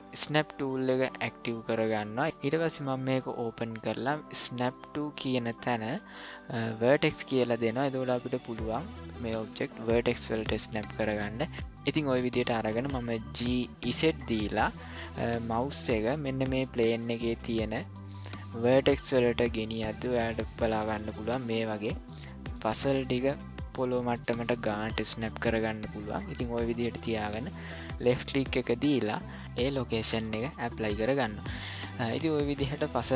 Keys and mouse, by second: 0.1 click, 3.1-9.1 drag, 10.8-11.5 shift+middle drag, 13.4 g, 30.8 shift+middle drag, 31.5-32.3 middle drag, 32.6 shift+middle drag.